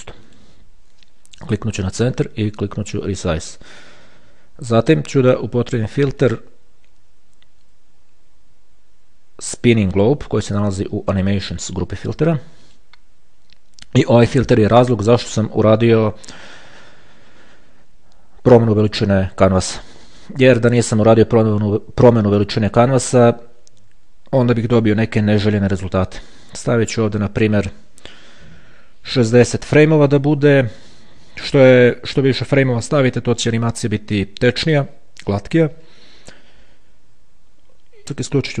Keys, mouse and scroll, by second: 0.5 click, 0.5 KP_0, 2.2 click, 3.4 click, 6.5 click, 12.9 click, 14.7-15.9 drag, 27.1 click, 29.8 KP_6.